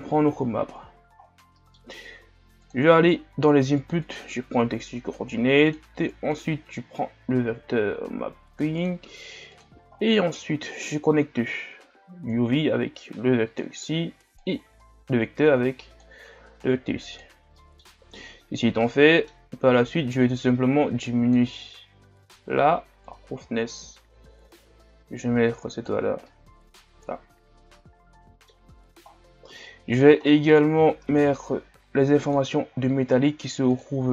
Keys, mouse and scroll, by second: 0.0-1.2 drag, 13.6 click, 16.6 click, 17.5 middle click, 17.8 scroll up 3, 20.5-26.3 drag, 26.3-30.0 middle drag, 30.0 click, 31.1 shift+d.